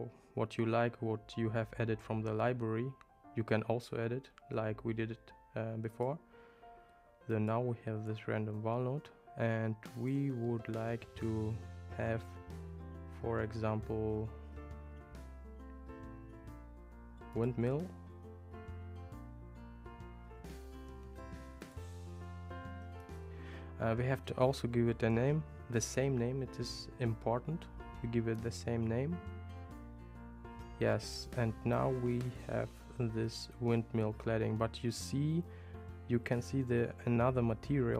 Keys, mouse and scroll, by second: 6.0-7.6 drag, 10.0-17.6 drag, 20.5 click, 21.6-29.8 drag.